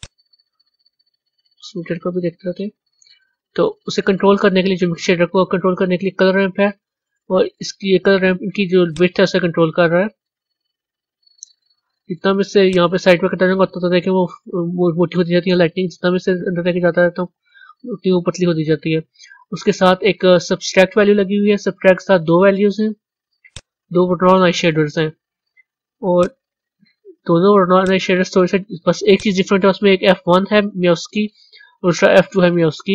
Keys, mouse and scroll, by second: 0.0 click, 0.9 z, 1.8-2.5 middle drag, 2.5-2.9 scroll up 2, 9.2-15.6 drag, 23.4 click, 26.1 click, 27.7 click, 29.0 click.